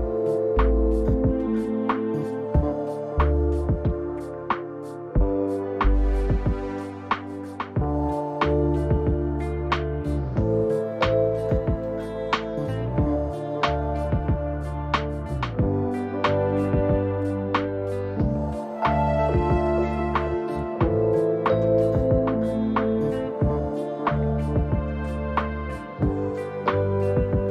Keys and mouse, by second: 2.4 s, 4.0 click, 7.0 q, 10.7 s, 12.4 Tab, 13.1 s, 18.9 alt+z, 19.6 alt+z, 20.6 1, 21.8 click, 23.0 g.